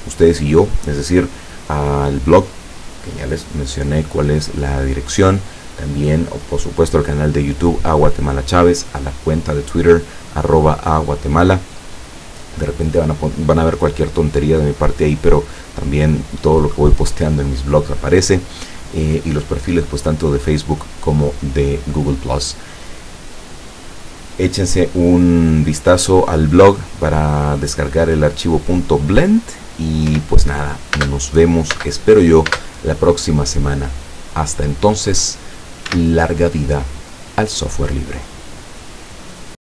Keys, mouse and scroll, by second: 30.1 p, 31.0 space, 31.8 space, 32.5 space, 36.0 Escape.